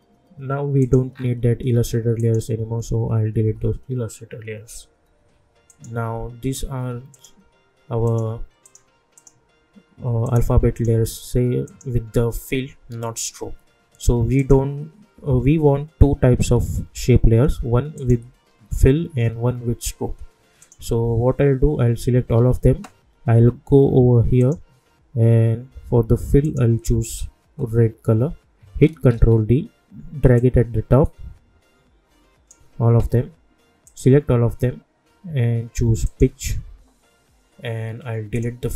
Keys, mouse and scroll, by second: 1.1 scroll down 1, 2.2 shift+click, 5.7 click, 7.1 shift+click, 14.3 click, 17.9 click, 20.6 click, 22.3 ctrl+a, 24.4 click, 29.1 ctrl+d, 30.3-33.8 drag, 36.0 click, 38.3 click.